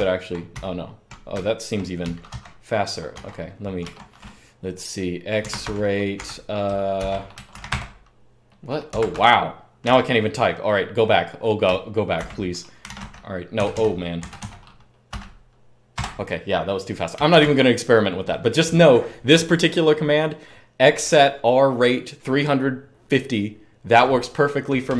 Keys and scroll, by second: 1.1-2.2 typing, 2.0 super+k, 3.0 super+Page_Down, 3.6 super+Page_Up, 3.7 super+p, 5.4 super+Page_Up, 6.8-7.2 typing, 8.7 super+2, 8.9 super+2, 11.9 super+2, 12.5-13.5 typing, 15.7 typing, 17.0 typing, 24.7 super+1.